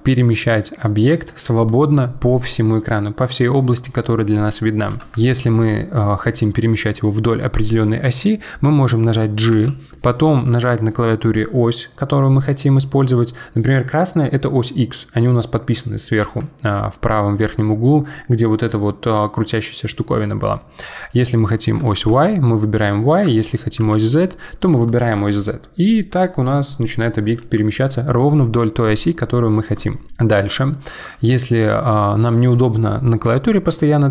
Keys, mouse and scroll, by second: 9.5 g, 30.1-33.8 middle drag.